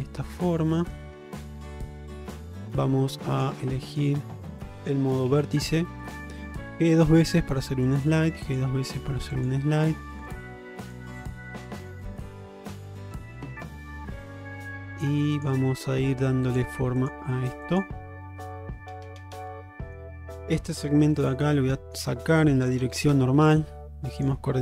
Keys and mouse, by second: 0.0-1.0 middle drag, 1.3 Tab, 1.6 middle drag, 2.2-2.6 middle drag, 3.4 click, 3.8 middle click, 5.4 1, 6.1 click, 7.1 g, 8.5 click, 8.8 g, 9.7 middle click, 11.2 g, 12.4 click, 12.7 g, 13.5-14.7 middle drag, 15.9 g, 17.1 click, 17.3 g, 18.3 middle click, 19.6 middle click, 21.1 2, 21.6 middle click, 22.2 shift+middle click, 23.5 ,.